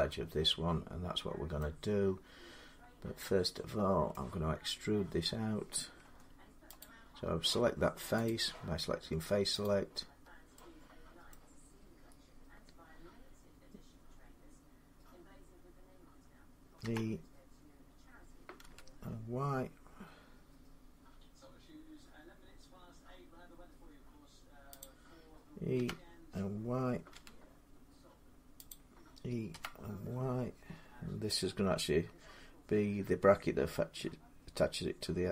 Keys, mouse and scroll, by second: 1.3 middle click, 2.4-3.0 scroll up 3, 3.9 middle click, 4.3-5.8 scroll up 3, 5.8 Tab, 6.6 click, 7.3 scroll down 3, 8.0 click, 9.4 click, 9.9 scroll down 2, 10.7 scroll, 11.1 middle click, 16.6 e, 18.4 y, 24.6-28.5 drag, 25.5 e, 26.9 y, 29.3 e, 33.5 click.